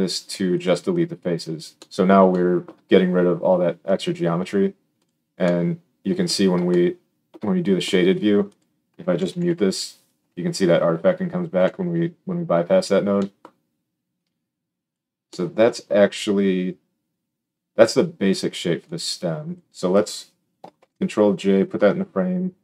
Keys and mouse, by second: 5.0-8.4 drag, 8.5-14.1 drag, 9.3 m, 10.1 m, 10.5 m, 11.5 m, 20.7 ctrl+j, 21.7 F2.